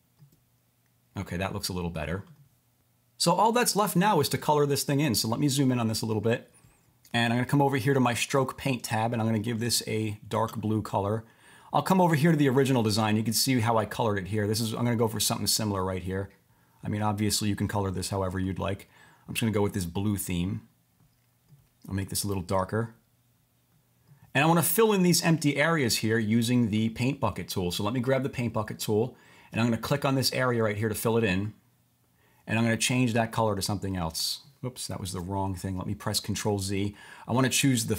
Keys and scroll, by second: 35.1 super+z.